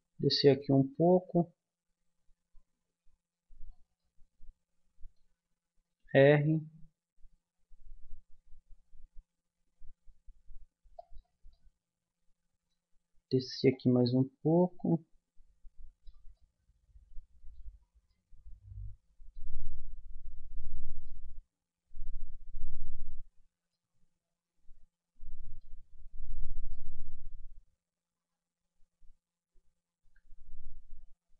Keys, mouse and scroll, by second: 3.9-5.9 middle drag, 6.0 r, 11.5-13.7 middle drag, 13.7-15.5 drag, 16.3 middle click, 22.9-25.4 middle drag, 25.9-28.7 middle drag.